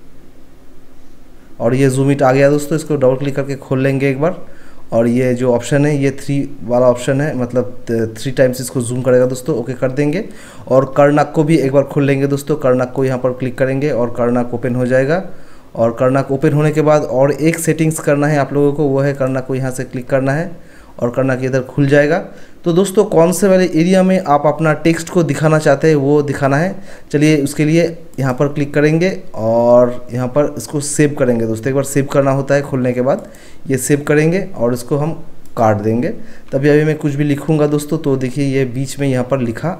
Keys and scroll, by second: 37.6-38.2 typing.